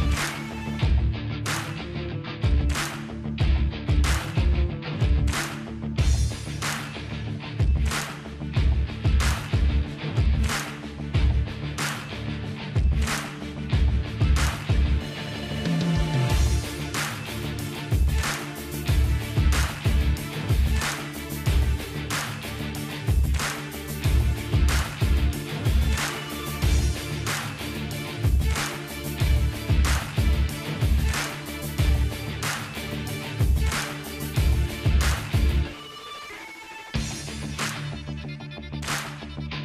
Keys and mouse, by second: 1.6 ctrl+i, 1.8 h, 2.0 Tab, 2.4-3.9 middle drag, 3.9-7.3 drag, 7.3 middle click, 7.4-8.4 drag, 8.6-11.1 drag, 11.1 middle click, 11.6-13.6 drag, 13.6-18.6 middle drag, 18.6-22.6 drag, 22.6-25.8 middle drag, 25.8 click, 26.7 middle click, 26.8 click, 27.8 middle click, 28.2 click, 29.2-31.7 middle drag, 31.7 click, 32.2 ctrl+b, 35.8-38.8 drag, 35.8 KP_0, 37.6 alt+h, 38.8 middle click, 39.2 middle click.